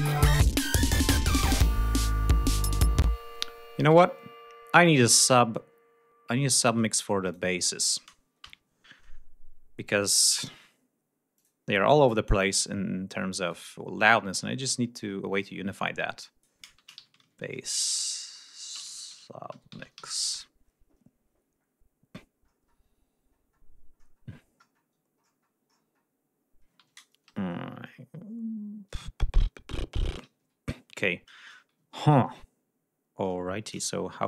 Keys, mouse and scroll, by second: 0.3-1.0 scroll down 4, 2.4 scroll down 2, 2.9 space, 3.2 scroll down 2, 5.3-5.9 scroll up 2, 5.9 scroll up 1, 7.1 click, 8.3 ctrl+shift+n, 11.3 click, 12.2-13.6 drag, 13.9 click, 15.0 scroll down 2, 16.1 click, 16.4-20.4 typing, 22.3-22.8 scroll down 2, 23.2-23.6 scroll down 2, 23.9-24.2 scroll down 2, 24.5-25.5 scroll down 2, 25.6-26.0 scroll down 2, 26.1-26.5 scroll up 2, 27.2 ctrl+Up, 30.1 ctrl+Down.